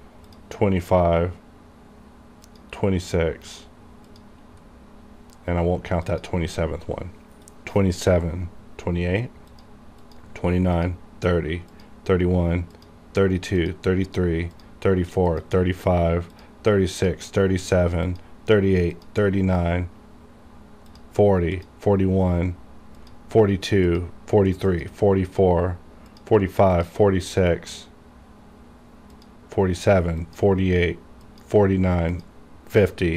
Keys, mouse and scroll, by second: 0.4 click, 4.8 scroll up 1, 6.2 click, 20.4 scroll down 1, 21.0 click, 25.5 scroll down 1, 26.2 click, 27.3 scroll down 1, 29.3 click.